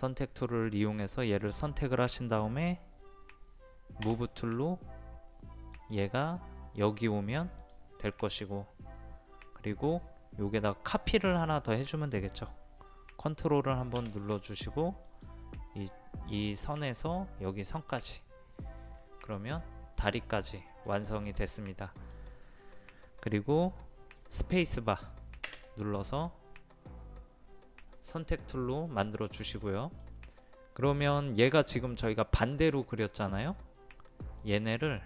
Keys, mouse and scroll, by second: 1.3 click, 4.1 m, 5.7 click, 15.1 click, 18.2-22.4 middle drag, 26.5 space, 28.9-30.5 middle drag, 34.4-35.0 drag.